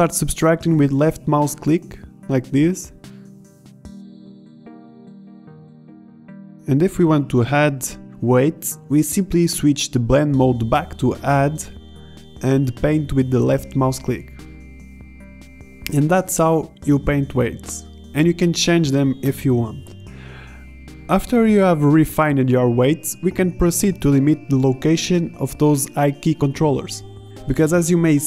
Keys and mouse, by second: 1.6 ctrl+z, 2.5 ctrl+z, 6.8-14.3 middle drag, 14.3 ctrl+z, 16.1 middle drag, 16.7 middle click, 17.4-17.7 middle drag, 18.1 middle click, 18.7 click, 19.1-19.5 middle drag, 22.6-25.8 middle drag, 26.4-27.7 middle drag.